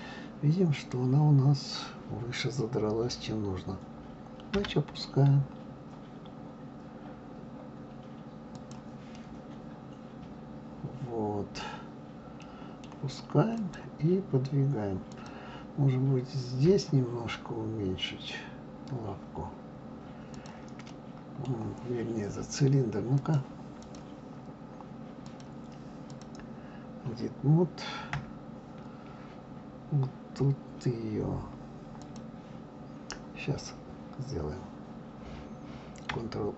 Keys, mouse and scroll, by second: 0.7 click, 4.5 g, 9.1-12.1 middle drag, 12.4-13.6 middle drag, 13.6 click, 15.1 click, 20.3 click, 20.9-23.2 middle drag, 23.2-25.4 drag, 26.0 click, 28.1 KP_Divide, 29.4-29.8 scroll down 2, 32.0 click.